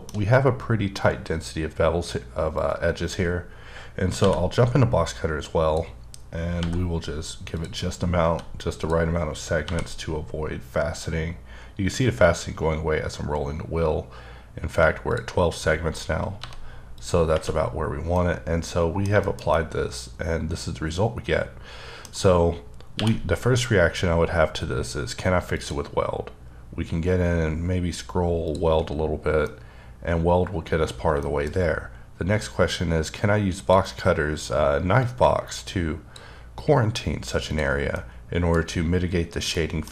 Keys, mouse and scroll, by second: 0.1-1.5 shift+scroll up 1, 1.5-2.0 scroll up 1, 2.6 click, 4.2 b, 6.6 b, 6.7-7.1 scroll up 6, 7.5 click, 8.2 g, 8.8 click, 9.6 b, 9.9-11.1 scroll down 6, 11.1-11.5 scroll up 3, 12.0 scroll up 1, 12.6 scroll up 1, 13.3 scroll up 1, 14.4 scroll up 1, 15.1 click, 16.4 g, 16.9 click, 18.1 middle click, 22.9 q, 25.5 q, 25.6 click, 26.3-27.4 scroll up 3, 27.4-28.4 scroll up 2, 28.4 click, 29.5 middle click, 30.9 scroll down 1, 31.2 shift+middle click, 33.7 click, 35.0 click, 37.5 click, 37.9 middle click, 39.5 middle click.